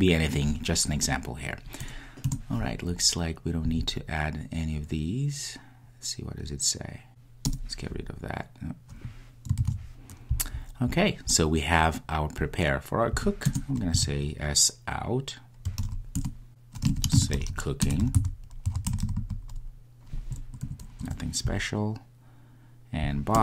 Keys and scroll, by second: 9.6 super+z, 9.8 super+z, 16.2 Return.